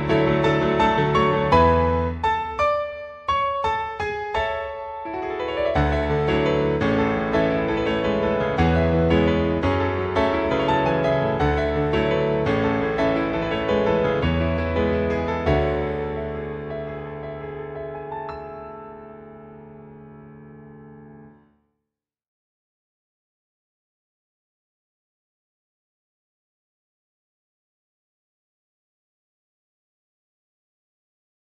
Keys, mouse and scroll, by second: 0.3 click, 1.1 click, 10.6 BackSpace, 11.7 o, 12.6 Left, 12.7 Left, 15.1 Right, 15.3 Right, 20.3 click, 21.9 click, 24.8-25.8 scroll down 4, 25.8-26.7 scroll up 7, 26.7-28.2 scroll down 7, 28.3 click, 30.6 ctrl+Tab.